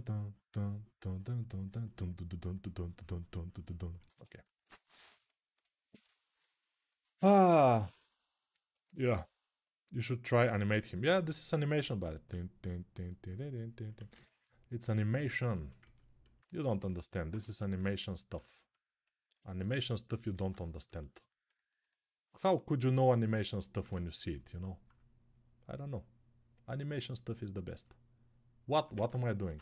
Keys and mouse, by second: 3.8 ctrl+z, 4.7-14.8 drag, 13.8 ctrl+z, 16.3-19.4 ctrl+alt+shift+drag, 19.4-26.5 middle drag, 20.1 Tab, 23.6 Tab, 25.1-29.6 drag, 28.7 ctrl+z, 29.2 Tab.